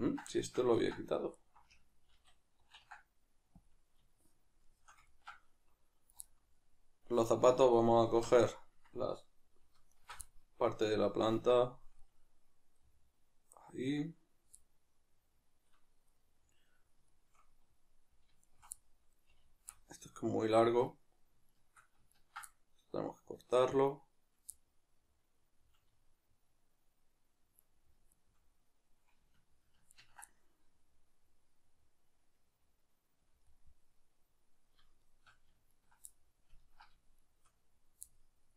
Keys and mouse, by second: 1.3 alt+right click, 2.1 ctrl+w, 4.1-7.3 shift+middle drag, 7.3 alt+right click, 8.0 KP_Decimal, 8.5-9.9 middle drag, 9.9 alt+shift+right click, 10.3-18.4 middle drag, 18.4-18.8 alt+shift+right drag, 18.8-21.4 middle drag, 21.4 shift+right click, 22.1 ctrl+right click, 22.5-28.1 middle drag, 28.1 shift+right click, 29.9 ctrl+right click, 30.3-35.0 middle drag, 35.0 shift+right click, 35.7 ctrl+right drag, 36.1-37.2 middle drag, 37.2 shift+right click, 38.1-38.5 middle drag.